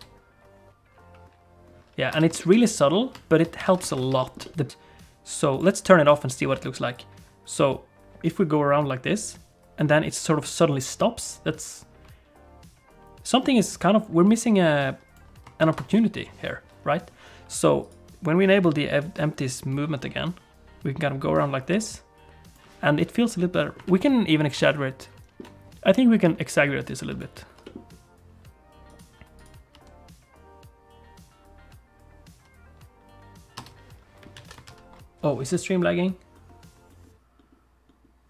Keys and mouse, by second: 2.2 space, 2.4 shift+middle click, 2.6 middle click, 3.7 alt+a, 3.9 ctrl+s, 4.2 shift+click, 4.4 middle click, 4.8-6.7 drag, 8.7-15.2 drag, 15.6 ctrl+s, 17.8 click, 19.1-22.6 drag, 23.9 ctrl+s, 24.8 ctrl+middle click, 27.0 click, 27.6 g, 29.4 click, 29.7 space, 33.6 space, 34.4 alt+a, 34.7 ctrl+s.